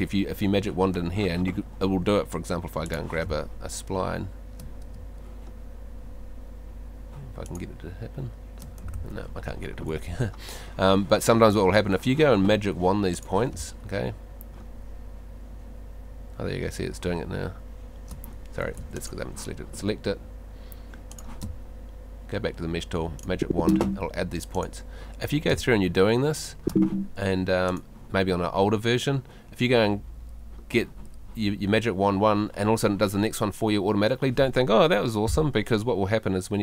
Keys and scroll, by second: 3.2 space, 4.9 space, 9.6 super+z, 13.5 space, 18.4 Escape, 21.4 space, 25.5 space.